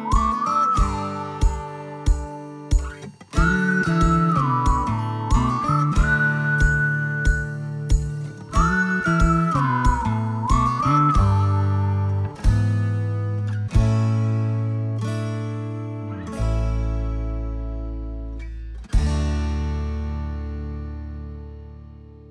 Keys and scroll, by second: 2.6 Left, 2.8 Left, 3.0 Left, 3.1 Left, 4.1 Left, 5.0-14.3 typing, 10.5 Delete, 14.6 Escape, 16.8 space.